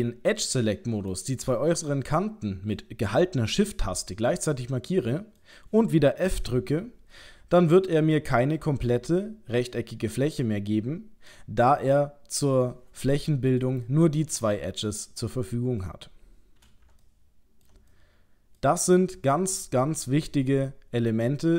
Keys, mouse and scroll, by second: 1.1 shift+click, 1.7 middle click, 4.1 middle click, 6.3 f, 11.3 middle click, 13.6 middle click, 17.0 ctrl+middle click, 17.9 middle click.